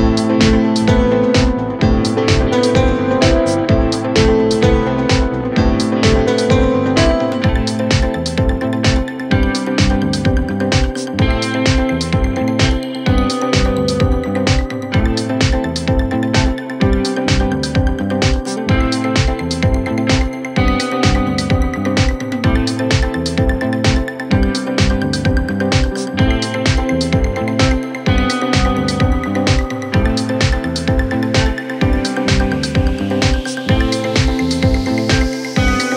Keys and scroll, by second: 10.9 ], 12.3 ], 13.9 ], 21.6 Delete, 26.6 Escape, 31.6 ctrl+z.